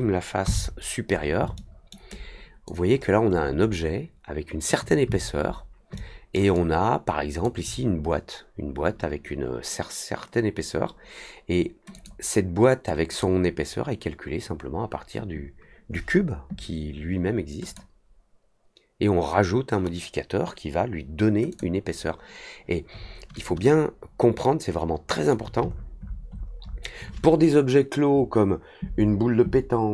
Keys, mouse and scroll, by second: 1.5-1.8 alt+middle drag, 2.0-2.6 alt+drag, 2.9 alt+middle click, 3.2 alt+middle click, 5.0-5.5 alt+scroll up 2, 5.9-6.3 alt+middle drag, 6.5-7.4 alt+drag, 11.9 click, 13.0 click, 17.6 click, 21.4 click, 23.6-25.2 alt+drag, 25.6 alt+middle click, 25.9 alt+middle click, 26.3 alt+middle click, 26.6 alt+middle click.